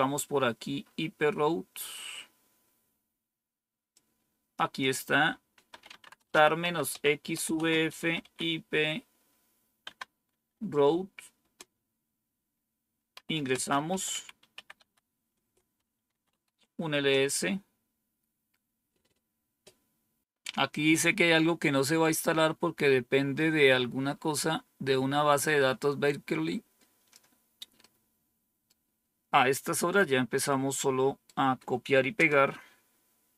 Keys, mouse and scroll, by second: 3.8 click, 4.3-8.1 typing, 9.7 typing, 11.3 typing, 13.0-16.8 typing, 20.2-20.7 scroll down 2, 25.3-27.0 drag, 27.7 right click, 29.9-31.2 right drag, 32.1 Return.